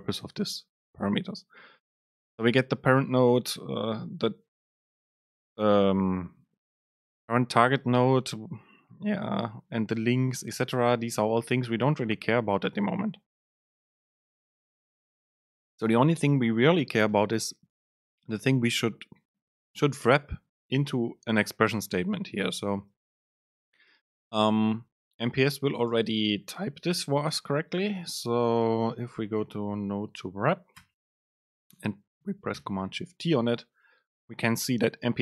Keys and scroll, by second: 26.1 super+space, 32.6 Left, 32.8 ctrl+shift+super+t.